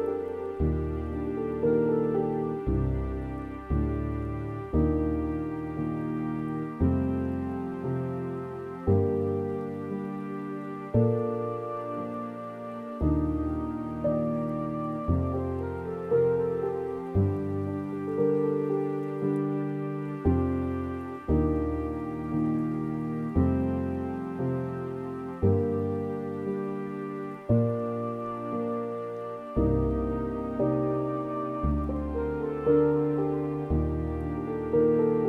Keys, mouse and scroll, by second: 4.0 scroll down 2, 4.7 s, 6.8-7.2 scroll down 3, 7.2 scroll up 4, 7.3 Tab, 7.7 middle click, 8.1 scroll down 3, 8.7-10.4 middle drag, 12.7 shift+a, 14.7-15.1 scroll up 2, 15.1-19.8 middle drag, 26.1 middle click, 26.9 scroll down 2, 27.1 scroll up 3, 28.1 scroll up 6, 28.2-28.5 scroll down 2, 28.5 s, 31.1-31.5 scroll down 2, 31.5-35.2 drag.